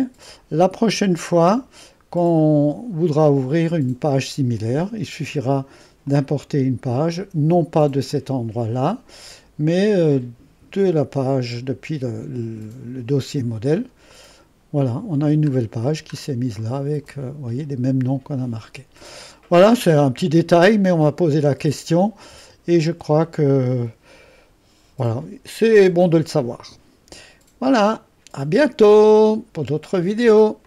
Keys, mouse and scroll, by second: 0.0 click, 1.5 click, 2.4 click, 6.0 click, 6.5-6.8 drag, 8.1 click, 10.1 click, 14.1 click, 15.6-16.4 scroll up 4, 16.6 middle click, 17.0 middle click, 17.1-19.3 scroll up 2, 19.3 scroll down 2, 19.9-20.5 scroll down 2, 20.7-21.2 drag, 21.2-22.9 right drag, 22.9 Escape, 30.6 click.